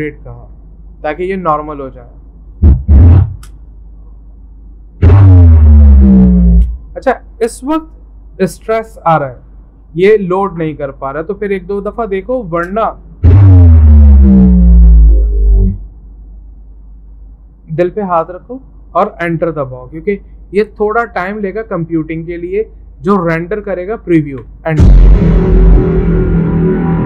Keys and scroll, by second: 0.0-3.4 typing, 0.3 Return, 24.4 Return.